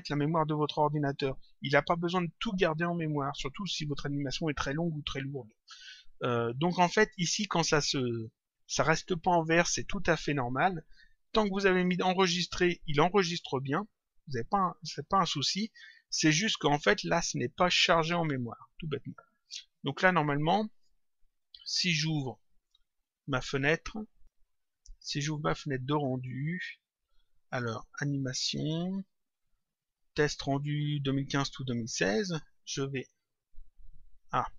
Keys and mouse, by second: 24.2 click, 26.5 click, 27.9 click, 31.6 click, 33.4 click.